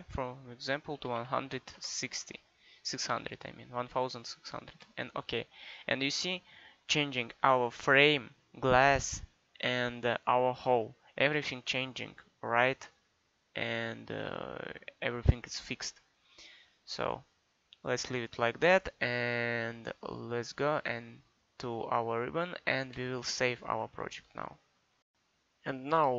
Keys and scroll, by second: 1.0 1, 1.2 6, 1.5 0.